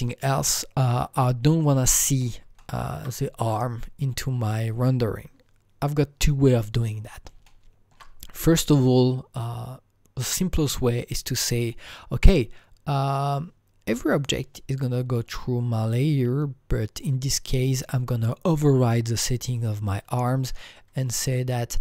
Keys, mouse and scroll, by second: 0.0 click, 2.6-5.5 alt+middle drag, 7.3 alt+middle click, 7.3 click, 7.4-10.4 alt+middle drag, 14.1 click, 19.5 click, 19.5-21.2 alt+middle drag, 19.5 click, 21.2 click.